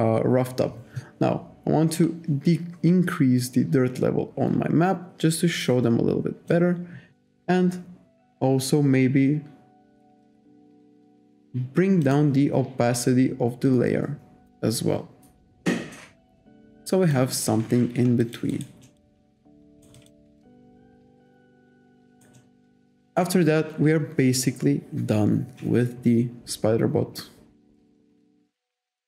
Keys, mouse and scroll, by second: 2.0 click, 10.2 click, 12.1 click, 13.0 click, 18.3 alt+click, 18.6 alt+right click, 18.9 alt+middle click, 19.4 alt+click, 19.8 alt+right click, 20.3 alt+middle click, 21.4 alt+click, 21.8 alt+middle click, 23.0 alt+right click.